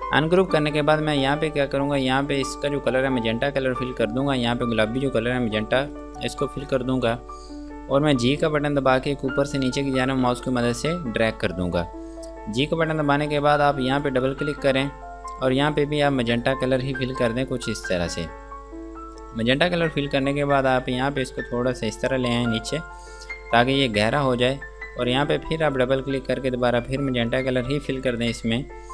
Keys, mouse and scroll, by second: 6.2 click, 8.9 g, 9.3 click, 14.3 click, 21.3 click, 25.3 click.